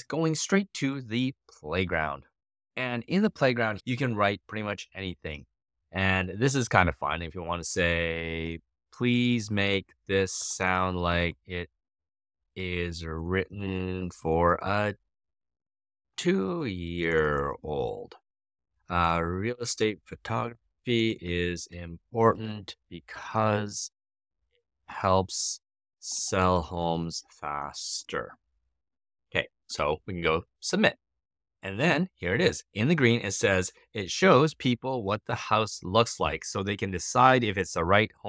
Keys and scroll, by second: 8.1-28.4 typing.